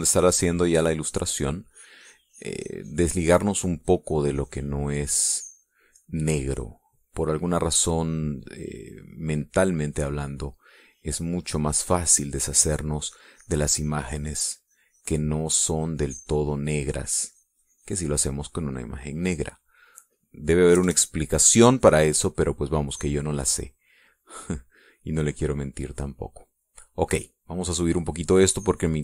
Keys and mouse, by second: 0.9-2.5 drag, 2.7-5.8 drag, 10.7 click, 11.3-19.3 drag, 20.9 middle click, 21.7 KP_Add, 22.2-23.3 drag, 23.4 click, 25.3-26.4 drag, 26.6 click, 27.8 middle click.